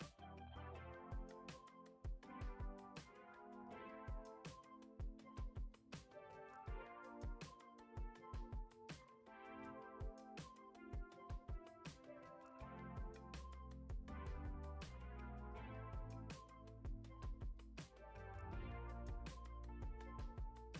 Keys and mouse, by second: 0.4 click, 1.1 KP_1, 1.9 ctrl+Tab, 3.2 click, 4.2 click, 4.5-6.3 drag, 9.1 F6, 9.9 shift+middle click, 10.8 click, 11.6 middle click, 12.4 middle click, 13.3 click, 14.3 middle click, 15.0 middle click, 15.7-16.8 drag, 17.2 click, 18.1 KP_1, 19.1 shift+middle click, 19.9 click.